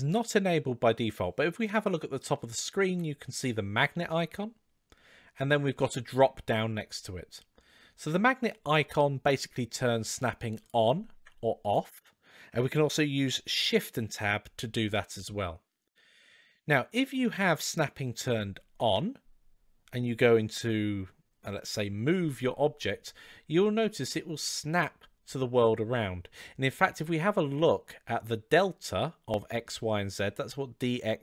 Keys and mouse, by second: 10.4 click, 11.4 click, 13.8 shift+Tab, 14.8 shift+Tab, 18.6 shift+Tab, 21.9 g.